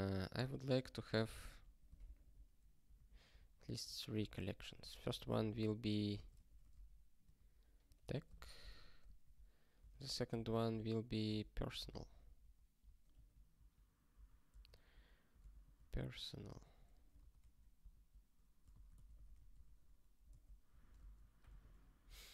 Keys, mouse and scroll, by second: 1.0 ctrl+f, 1.1 ctrl+f, 2.0 ctrl+alt+@, 2.9 alt+w, 3.3 ctrl+e, 3.6 ctrl+b, 3.7 ctrl+b, 4.1 Return, 4.3 ctrl+y, 4.8 alt+b, 5.0 alt+b, 6.2-7.3 typing, 7.3 ctrl+a, 8.0 ctrl+f, 8.4 ctrl+alt+@, 9.2 alt+w, 9.9 ctrl+alt+f, 10.3 Return, 10.5 ctrl+y, 11.2 Tab, 11.6 alt+b, 11.8 alt+b, 13.1 alt+f, 13.5 alt+f, 14.1 alt+b, 14.6 alt+d, 14.7-16.6 typing, 17.2 alt+b, 17.4 alt+c, 17.9 ctrl+p, 18.8-21.4 typing, 20.3 alt+d, 21.5 ctrl+s.